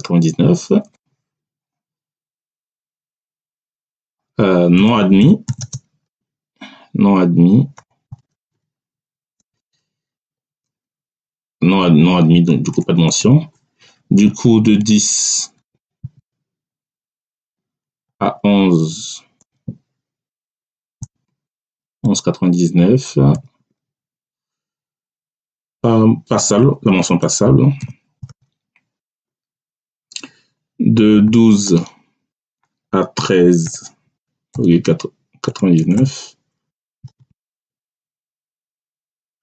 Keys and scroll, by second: 0.7 Return, 2.5 Tab, 4.7-6.0 typing, 7.6-10.1 typing, 11.6 BackSpace, 13.0 Return, 15.5 1, 15.9 0, 17.2 Tab, 18.0 1, 19.4 ,, 20.2 BackSpace, 20.9 ,, 21.7 9, 23.2 9, 23.5 Tab, 26.4-28.2 typing, 28.9 Return, 31.1 1, 31.5 2, 32.2 Tab, 33.1-36.8 typing, 37.7 Tab, 39.3 a.